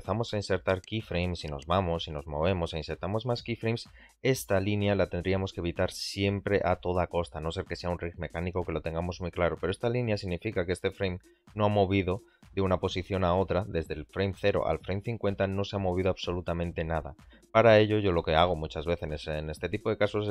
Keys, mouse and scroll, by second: 1.4 shift+Right, 2.1 i, 6.8 click, 10.7 click, 11.5-15.5 drag, 16.0 middle drag, 17.8 click, 18.4 middle click, 18.9 shift+middle click.